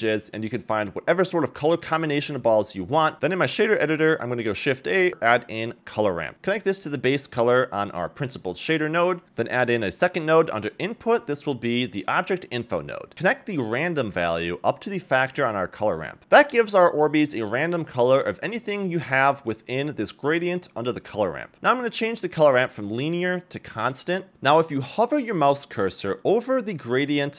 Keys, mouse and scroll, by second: 0.7-1.9 scroll down 2, 2.2 click, 2.7 shift+a, 6.3 scroll up 1, 6.8 middle click, 7.5-8.2 drag, 9.5 shift+a, 13.6-14.2 drag, 19.1-19.9 scroll up 3, 21.3 click, 22.6 click, 24.9 scroll up 2, 25.7 scroll up 1.